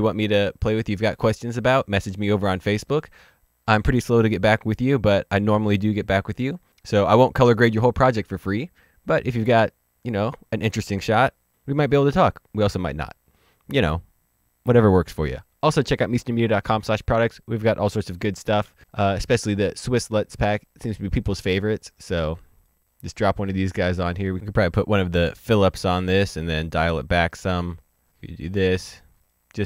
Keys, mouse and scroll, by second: 22.8 click, 24.2 scroll down 1, 24.3 click, 29.1 click.